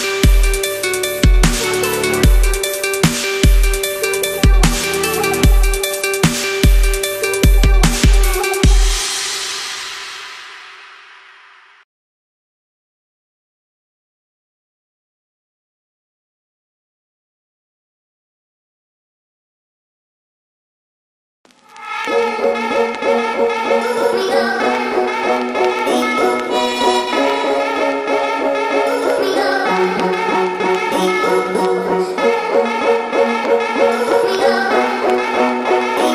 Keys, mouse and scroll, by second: 0.0 ctrl+=, 0.5 space, 0.6 click, 0.8 space, 1.3-2.1 drag, 3.2 =, 6.1 click, 7.6 BackSpace, 8.3 ctrl+=, 8.6 space, 8.7 click, 8.9 space, 9.6-10.5 drag, 11.6-13.0 shift+drag, 13.7 Right, 14.8 click, 15.5 space, 15.7 click, 15.9-16.5 space, 16.8 click, 16.9-17.8 space, 18.6-20.2 drag, 20.8-21.7 shift+drag, 28.3-29.0 drag, 32.6 space, 34.8 click, 36.0 click.